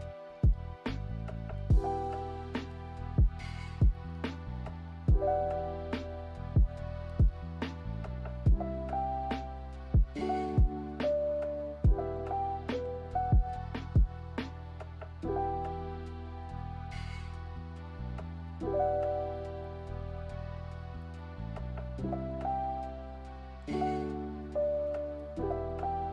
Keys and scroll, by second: 16.7 a.